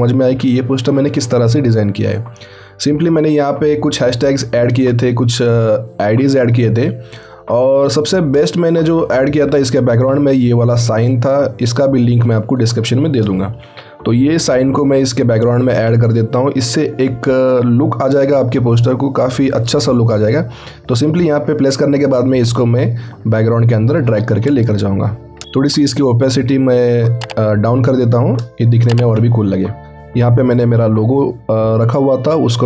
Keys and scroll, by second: 13.7 ctrl+t, 14.3 ctrl+alt+t.